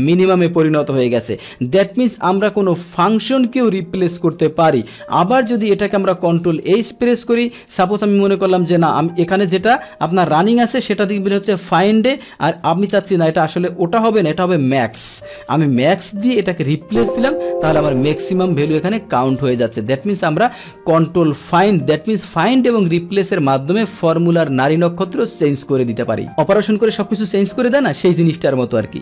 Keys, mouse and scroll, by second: 1.3 Return, 3.1-4.3 drag, 6.4 ctrl+h, 7.6 click, 12.7 Tab, 16.7-17.6 drag, 17.9-18.7 drag, 19.3 click, 23.3 click, 26.2 click, 27.9 click.